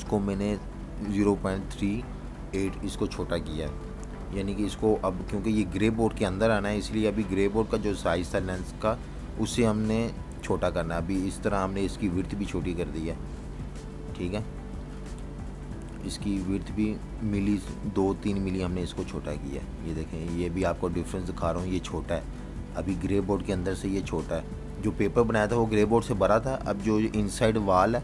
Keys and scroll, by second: 0.6 Return, 3.6 super+z, 4.5 shift+super+z, 5.0 super+z, 6.3 shift+super+z, 10.2-12.3 typing, 13.8 8, 14.6 Return, 15.4 v, 16.7 super+-, 16.8 super+-, 17.4-18.1 typing, 21.9-22.9 typing, 23.7 super+y, 25.1 super+y, 25.9 super+-, 26.7 v, 27.6 super+z.